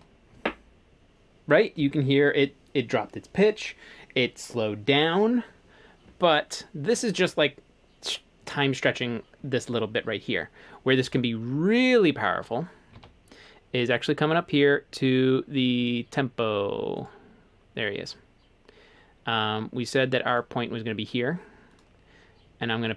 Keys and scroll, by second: 11.1 super+z, 13.0 super+z.